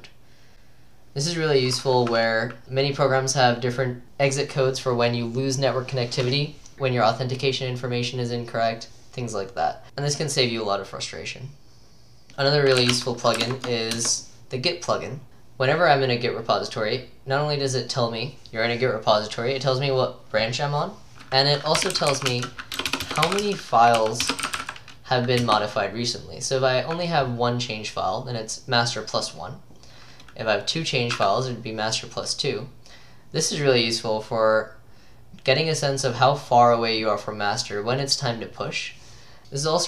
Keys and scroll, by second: 12.0-13.9 typing, 14.0 Return, 21.6-25.1 typing, 25.5 Return.